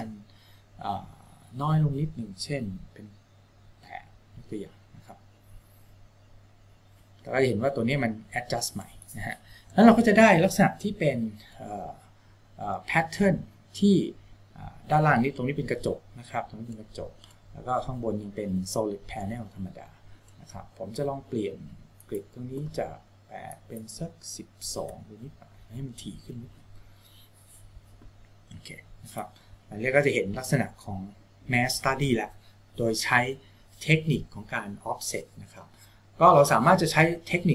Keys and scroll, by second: 4.2 KP_8, 25.1 2.